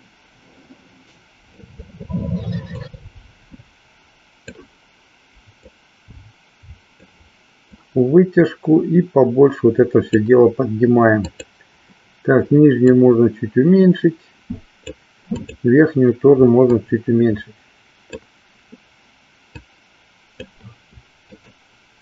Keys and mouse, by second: 2.7-4.6 drag, 5.6-7.0 drag, 7.7-10.1 drag, 11.2 click, 12.9-15.0 drag, 15.5 click, 16.7-18.2 drag, 19.5-20.6 drag, 21.4 shift+click.